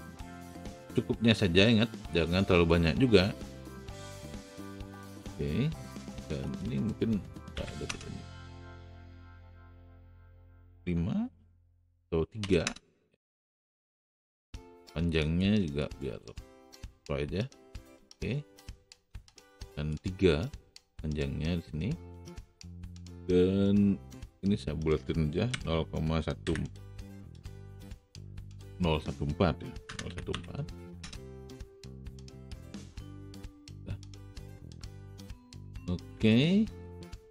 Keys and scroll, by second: 7.6 KP_5, 7.8 Return, 12.4 KP_3, 12.6 Return, 25.5 KP_Decimal, 26.4 KP_1, 28.2 BackSpace, 29.8 KP_0, 30.0 KP_1, 30.9 n.